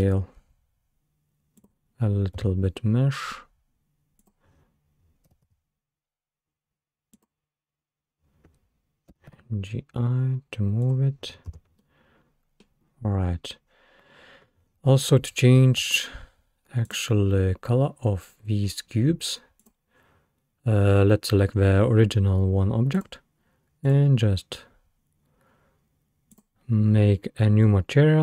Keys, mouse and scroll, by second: 1.6 click, 2.4 s, 5.3 g, 9.1 g, 11.5 space, 11.8-14.0 middle drag, 14.0-14.7 scroll down 3, 14.7-15.0 scroll up 2, 15.8 Escape, 16.9-17.3 drag, 17.3 scroll down 3, 17.7 scroll up 2, 18.3-18.6 scroll down 2, 18.6-19.0 scroll up 5, 19.6 click, 23.0 click, 23.9-26.7 drag.